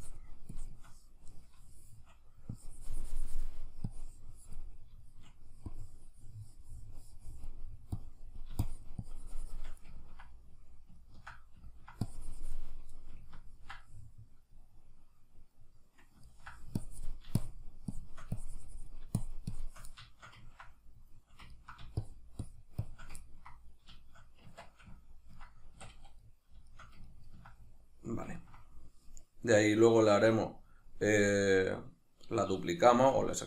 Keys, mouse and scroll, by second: 1.4-2.6 middle drag, 2.6-4.8 drag, 4.8 shift+middle click, 5.7-10.0 drag, 10.0-12.1 ctrl+middle drag, 12.1 click, 13.0-16.8 middle drag, 16.8-20.1 drag, 20.1-22.0 shift+middle drag, 22.0-23.2 shift+drag, 23.2-33.4 ctrl+middle drag, 24.5 Tab, 25.7 a.